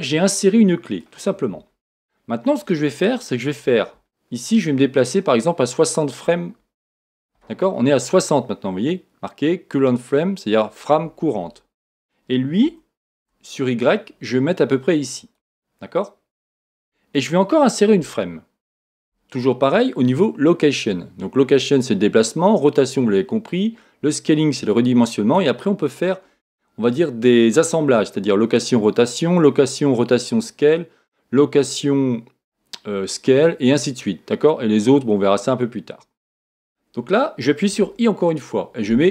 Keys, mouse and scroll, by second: 2.0 scroll down 1, 12.9 g, 18.0 |.